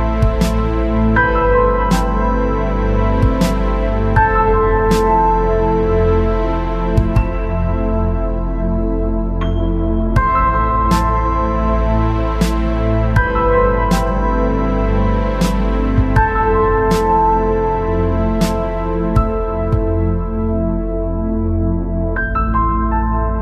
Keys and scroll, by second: 21.7-23.3 space.